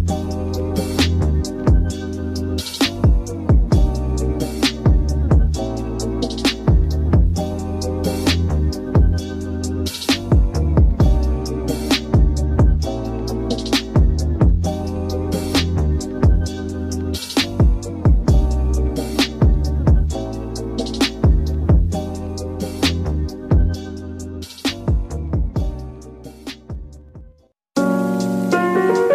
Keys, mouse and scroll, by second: 3.8 scroll down 2, 6.7 scroll up 1, 6.8 u, 7.3 u, 8.7-9.4 scroll down 5, 9.4-10.5 scroll up 1, 10.5 a, 11.2 click, 12.4 s, 16.7-17.2 scroll up 3, 17.2 click, 17.6 click, 17.9 g, 19.8 click, 20.1 g, 20.8 click, 21.3 g, 23.1 scroll up 1, 23.2 middle click, 23.9 click, 24.3 g, 25.2-29.0 middle drag, 29.0 click.